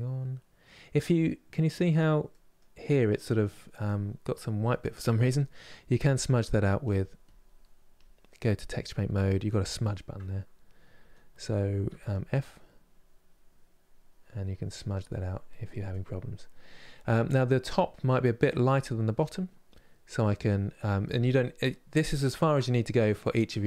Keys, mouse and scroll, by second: 7.0 click, 8.4 click, 11.6 f, 12.1-15.6 drag, 15.6-19.8 middle drag, 19.8 click, 22.0-23.6 ctrl+middle drag.